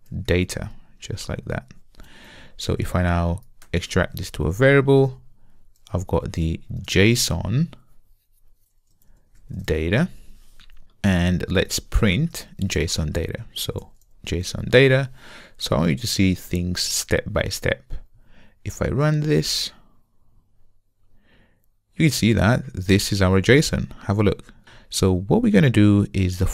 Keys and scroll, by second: 0.9 Return, 3.7 alt+super+v, 13.1 Return, 14.8 Return, 19.2 ctrl+r.